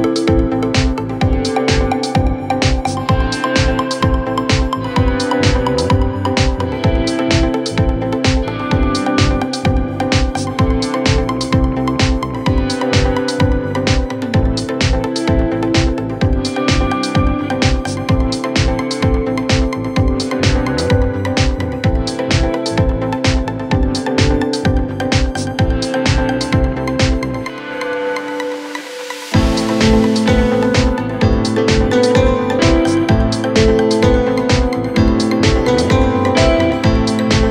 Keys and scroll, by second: 1.4 ], 2.9 4, 8.8 Return, 9.2 9, 9.4 0, 9.5 Return, 9.8 0, 10.0 Return, 10.5 F1, 11.1 F2, 15.2 3, 16.1 Delete, 16.6 Delete, 19.7 4, 21.5 3, 22.0 ], 32.9 4.